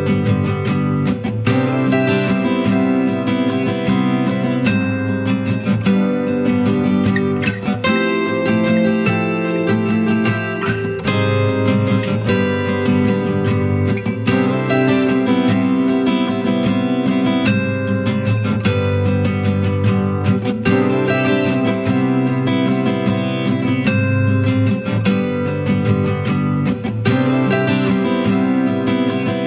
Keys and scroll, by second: 7.2-8.8 ctrl+space, 19.9 ctrl+j, 26.2 Return, 26.2 typing.